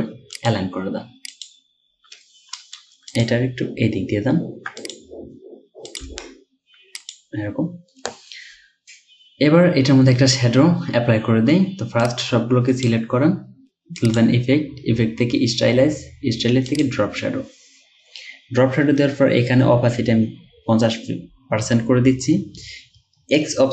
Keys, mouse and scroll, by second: 3.3 right click, 6.1 click.